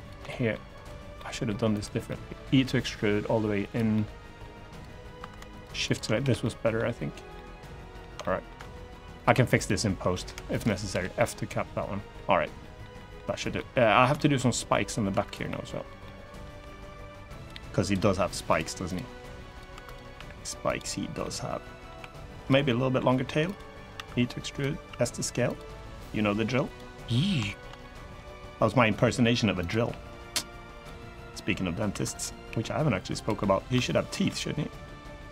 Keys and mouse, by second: 0.0 middle click, 0.9 middle click, 1.5 click, 1.8 middle click, 2.5 e, 3.4 click, 3.7 middle click, 4.9 2, 5.6 shift+click, 5.9 f, 6.1 middle click, 7.1 middle click, 7.9 middle click, 8.3 middle click, 8.9 click, 9.9 middle click, 10.9 middle click, 10.9 f, 12.3 middle click, 12.7 middle click, 13.2 3, 13.3 middle click, 13.9 shift+middle click, 14.8 2, 15.0 click, 15.2 middle click, 15.8 middle click, 16.3 g, 17.1 click, 17.5 click, 17.8 g, 18.2 click, 19.2 click, 19.2 g, 19.5 1, 19.6 click, 19.9 g, 20.4 click, 20.9 middle click, 21.7 3, 22.2 click, 22.4 middle click, 23.3 click, 23.7 e, 24.2 click, 24.5 s, 25.2 click, 25.4 g, 26.4 click, 27.2 shift+middle click, 27.5 middle click, 28.8 r, 29.3 click, 29.6 g, 30.5 click, 31.6 1, 32.2 g, 32.9 click, 33.1 middle click, 33.6 shift+middle click, 34.0 middle click, 34.6 middle click, 35.1 middle click.